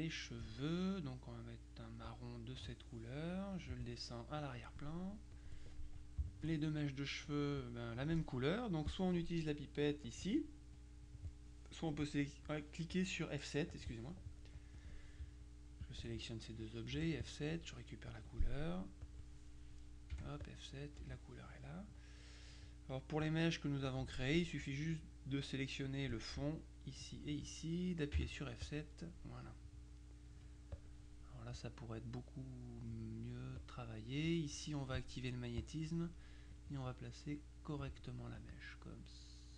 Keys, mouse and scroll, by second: 2.2 click, 3.8 click, 5.4 click, 6.4 shift+click, 10.1 click, 10.9 click, 13.8 click, 14.9 click, 15.9 shift+click, 17.0 F7, 17.3 click, 18.3 F2, 19.1 click, 20.2 F7, 20.5 click, 21.1 F1, 24.1 F2, 24.7 click, 27.1 shift+click, 28.3 F7, 28.7 click, 30.4 F2, 30.8 click, 31.6-33.4 drag, 33.7 click, 35.7 click, 36.6-38.3 drag, 38.5-39.5 drag.